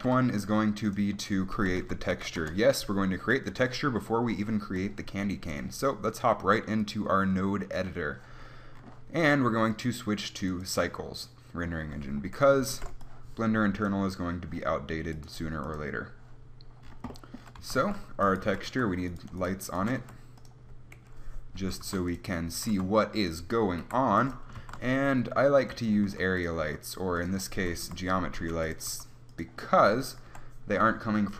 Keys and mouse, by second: 1.6 r, 4.7 click, 6.1-8.1 drag, 10.7-13.6 drag, 13.9 middle click, 15.1 click, 16.3-17.7 drag, 17.7 z, 18.5 z, 18.5 g, 19.8 g, 21.0 KP_1, 21.5 g, 22.1-23.2 drag, 22.6 g, 24.3-25.7 drag, 24.5 shift+a, 26.1 g, 26.5 click, 26.6 r, 27.8 KP_3, 28.4 g, 28.9 r.